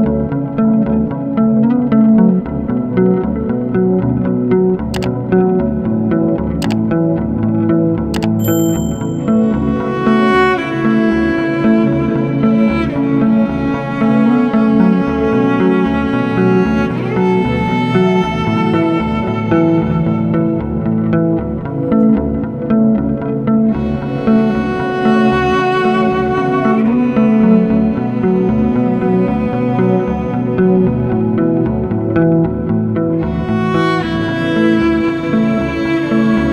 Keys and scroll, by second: 33.9 ctrl+d.